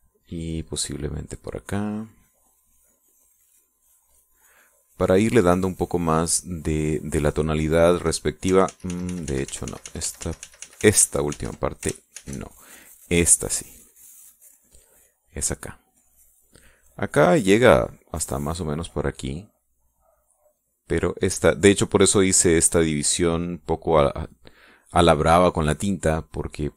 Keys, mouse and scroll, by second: 1.8-6.5 drag, 6.6 middle click, 9.4 ctrl+z, 12.6 ctrl+shift+z, 12.8 ctrl+shift+z, 14.0 click, 14.8-17.5 drag, 17.9-20.8 drag, 21.0-22.2 drag, 23.3 click.